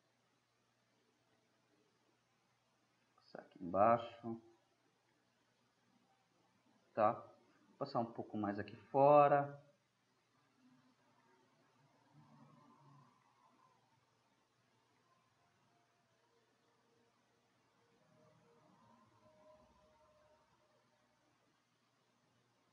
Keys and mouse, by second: 0.4-1.5 middle drag, 1.5 drag, 1.6-3.3 middle drag, 4.2-7.9 middle drag, 7.9-11.5 drag, 11.5-17.9 middle drag, 18.4-19.1 middle drag, 19.5-20.3 middle drag, 20.8-21.9 middle drag.